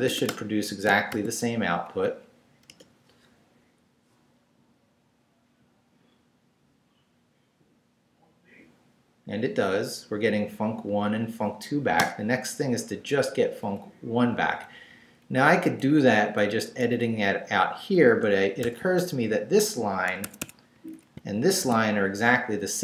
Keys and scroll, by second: 0.0-1.1 typing, 0.9 shift+Return, 1.7 shift+Up, 2.7 Return, 12.0 Return, 12.9 Down, 13.6 Up, 14.3 Right, 15.8 Down, 16.8 Up, 18.0 shift+Up, 18.6 shift+v, 20.2 Escape, 20.7 Down, 21.6 shift+v.